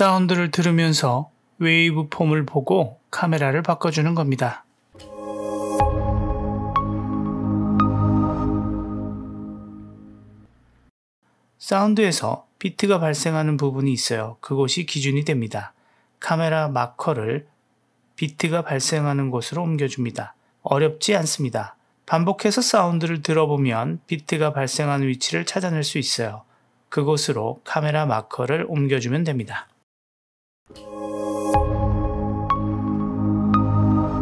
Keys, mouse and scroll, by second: 1.0-2.1 middle drag, 4.0-4.7 drag, 4.8 space, 10.9 space, 12.1 middle click, 13.6-14.6 drag, 14.9-15.3 drag, 15.5 space, 15.8 space, 17.0 click, 17.7 click, 17.8 g, 19.5 space, 20.1 space, 20.9-21.4 drag, 22.1 g, 23.5 click, 24.0 space, 24.7 space, 26.0-26.9 drag, 27.7 g, 29.7-30.0 middle drag, 30.2-30.6 drag, 30.6 space.